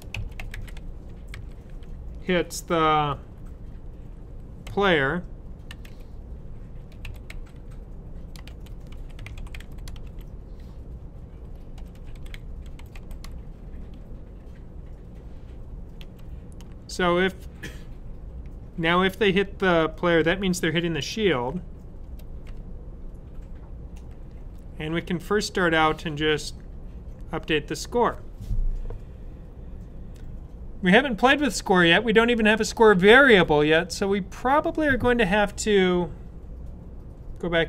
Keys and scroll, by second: 0.0-1.2 typing, 4.3-10.4 typing, 11.4-13.3 typing, 15.9 ), 20.9 {.